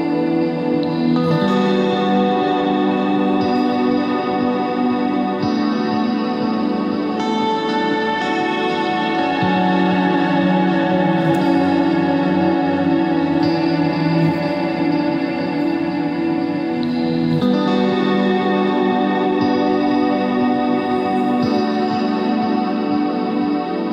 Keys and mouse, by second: 3.0 KP_3, 3.3 z, 3.4 c, 4.3 click, 5.0 s, 6.1 z, 8.3 ctrl+Tab, 9.3 click, 10.2-11.3 drag, 11.3 middle click, 20.0 middle click, 22.1 z.